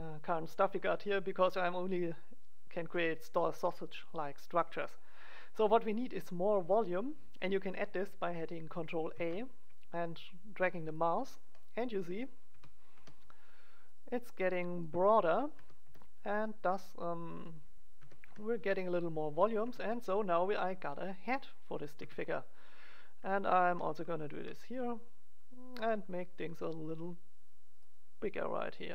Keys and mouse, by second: 9.1 ctrl+a, 11.0-12.3 drag, 12.5 e, 12.9 middle click, 13.9 click, 15.5 g, 16.8 click, 17.4-18.5 middle drag, 17.9 g, 18.5 click, 19.6 Tab, 21.9 Tab, 22.6-24.3 drag, 24.3 ctrl+a, 27.9 click, 28.7 middle click.